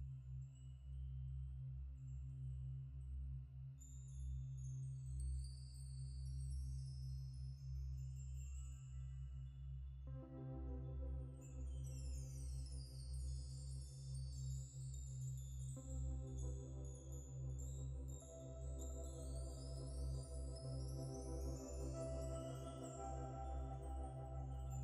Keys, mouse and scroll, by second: 0.0 alt+click, 2.0 alt+shift+click, 2.4 alt+click, 5.4 double click, 6.7 ctrl+-, 6.9 ctrl+-, 7.8 ctrl+F4, 9.4 ctrl+0, 10.0 typing, 10.2-11.4 scroll down 1, 11.9 Escape, 12.4 ctrl+0, 12.5 ctrl+-, 14.9 double click, 15.4 typing, 16.5-17.0 typing, 19.5 ctrl+shift+s, 20.7 Tab, 22.3-22.8 typing.